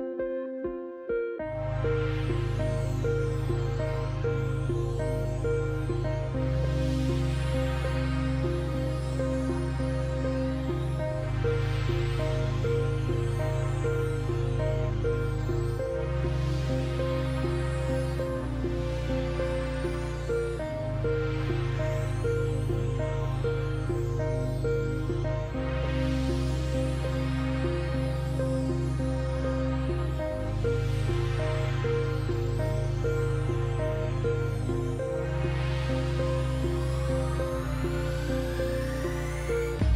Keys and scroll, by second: 4.6-8.4 typing, 9.6 s, 9.9 s, 10.8 shift+s, 11.4 s, 17.6 shift+s, 18.9 shift+s, 19.1 shift+s, 19.5 shift+s, 21.2 s, 27.2 s, 28.8 shift+s, 32.9 shift+s, 33.6 shift+s, 33.9 shift+s.